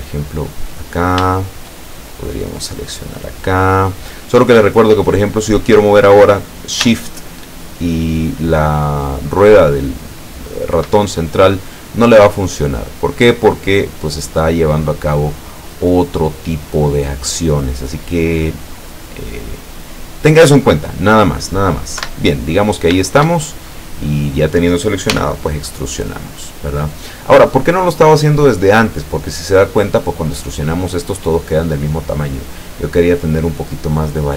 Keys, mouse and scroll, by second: 0.4 click, 3.2 click, 7.3-10.8 shift+middle drag, 13.3 click, 16.8 click, 20.7 click, 22.0 Escape, 22.7 scroll down 2, 23.4-24.7 shift+middle drag, 25.2 e, 27.4 click, 27.8-31.9 middle drag, 32.0-34.3 middle drag.